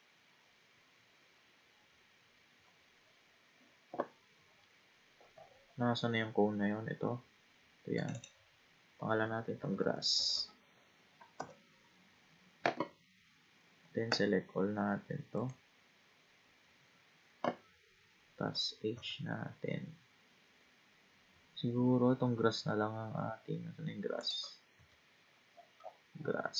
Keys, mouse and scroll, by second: 0.5-1.8 scroll down 8, 2.3 scroll up 2, 2.7-3.1 scroll down 3, 4.3-5.1 scroll down 9, 5.1-7.2 scroll up 22, 8.0 click, 8.2-10.3 drag, 10.3 s, 13.2-14.1 scroll down 3, 14.1 a, 15.4-18.4 right drag, 18.9 h, 21.8-22.6 scroll down 4, 22.6-23.0 scroll down 4, 23.0-24.2 scroll up 10, 24.2 click, 24.7 g, 25.3-26.5 scroll down 24.